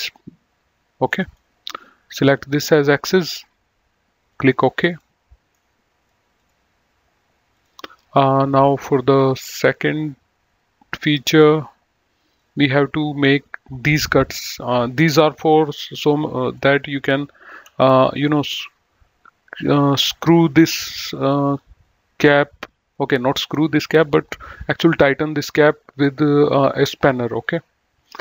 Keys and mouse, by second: 1.1 middle click, 2.1 click, 4.2 click, 5.5 middle click, 6.3 click, 7.6 click, 19.6 click, 21.8 click, 27.0 click.